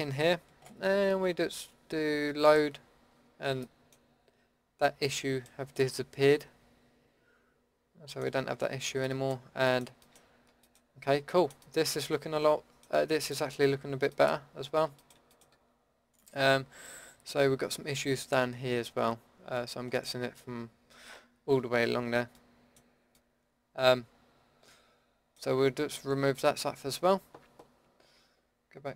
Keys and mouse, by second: 3.6 middle click, 5.1 middle click, 8.2-11.6 middle drag, 12.3 middle click, 13.0 Tab, 13.7 Tab, 14.3 Tab, 15.5 Tab, 23.1 Tab.